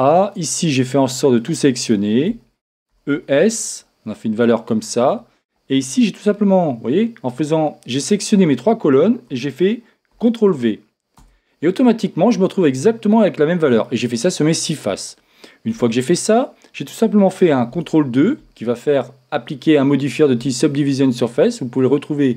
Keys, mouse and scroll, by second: 4.5 e, 14.8-16.8 middle drag, 14.8-15.7 scroll down 1, 15.7 Tab, 17.7 ctrl+t.